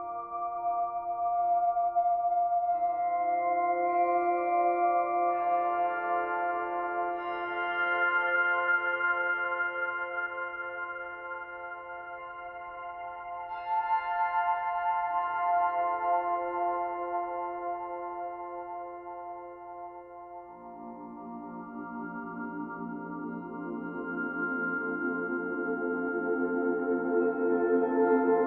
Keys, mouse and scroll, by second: 0.9 click, 1.3 click, 1.6 click, 1.8 click, 2.7 click, 3.6 click, 4.4 click, 5.1 click, 7.0 click, 7.1 scroll up 4, 7.3 b, 9.0-10.9 scroll down 1, 10.9 click, 11.7 click, 11.9 click, 12.9 click, 14.3 alt+h, 15.1 ctrl+z, 16.7 scroll down 5, 16.9 scroll up 1, 17.0-17.4 scroll down 2, 17.4 click, 18.3-19.2 drag, 19.4 shift+click, 19.7 click, 21.2 click, 22.1 click, 23.4 click, 24.9 click, 25.2 click, 25.9 click, 27.8 click, 28.1-28.4 scroll down 1.